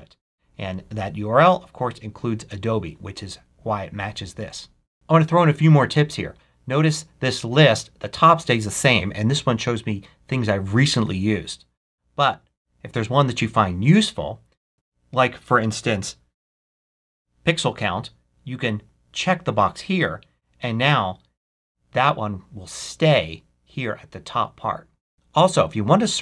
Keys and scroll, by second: 16.1-17.5 typing.